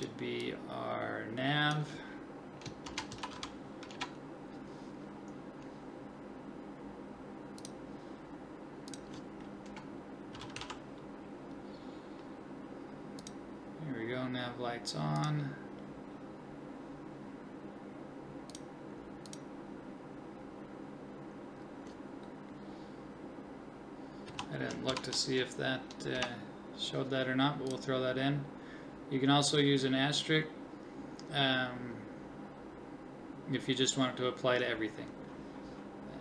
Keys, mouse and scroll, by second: 35.5-36.2 drag.